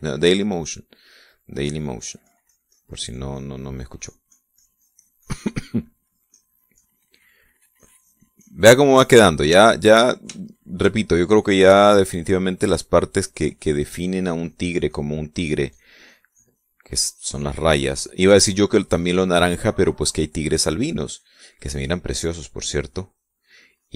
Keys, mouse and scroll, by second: 1.5 middle click, 2.2-2.5 scroll up 1, 2.5-6.5 drag, 6.9-8.1 drag, 8.3-10.1 drag, 10.4-11.1 shift+middle drag, 11.2 shift+middle click, 12.7-13.6 middle drag, 13.9-17.6 drag, 17.7-19.1 drag, 19.6-20.8 drag, 21.7-23.1 drag.